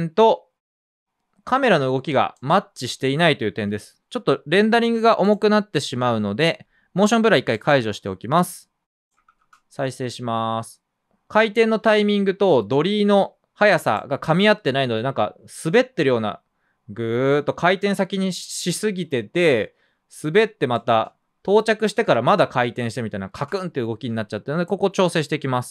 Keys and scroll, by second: 1.1 typing, 4.8 super+a, 9.1 space, 20.9 space.